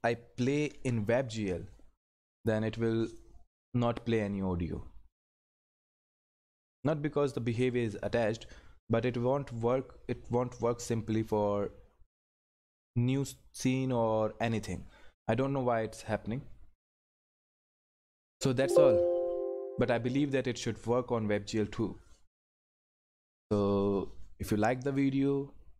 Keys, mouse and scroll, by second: 0.7 ctrl+F11, 6.7 click, 17.9 click.